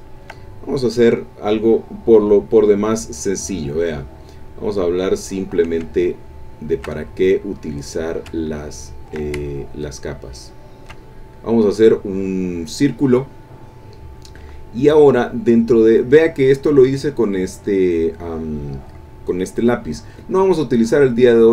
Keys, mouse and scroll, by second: 0.5 ctrl+middle click, 4.5 click, 6.0-7.0 shift+drag, 7.8-11.0 drag, 21.2 click.